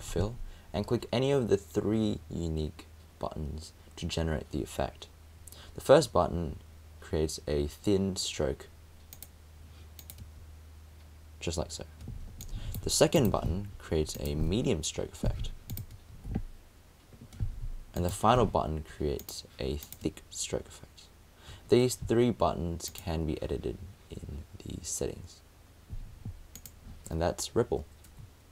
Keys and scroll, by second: 18.4 super+space, 18.5 super+z.